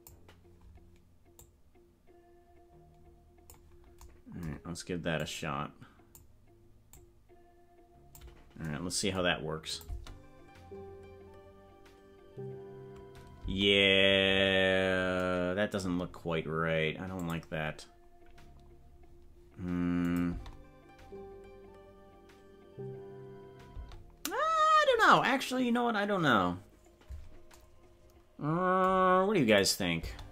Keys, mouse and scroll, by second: 1.5-4.0 drag, 5.2-6.2 drag, 6.9-8.2 drag, 9.8 click, 9.9 space, 13.6 space, 15.9 scroll down 1, 17.2 click, 17.7-18.0 scroll down 3, 18.3 scroll up 2, 20.1-20.6 drag, 20.3 space, 29.6 click, 30.0 space.